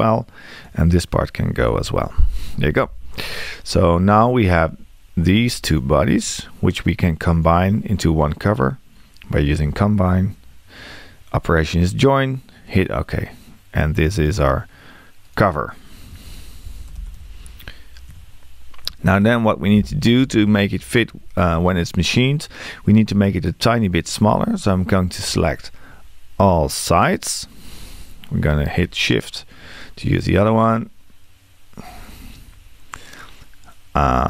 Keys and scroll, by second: 1.7 BackSpace.